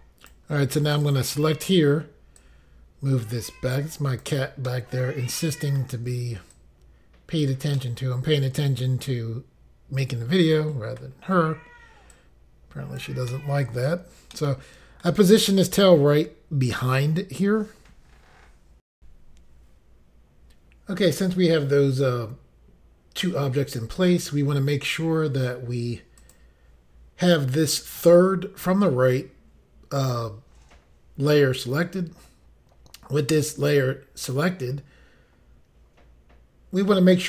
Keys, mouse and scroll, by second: 1.0 click, 1.1 click, 1.6 scroll down 1, 2.4 click, 4.7 middle click, 6.5 click, 7.8 middle click, 11.1 scroll up 1, 12.1 click, 13.3 middle click, 14.3 middle click, 18.9 Insert, 26.2 click, 26.3 click.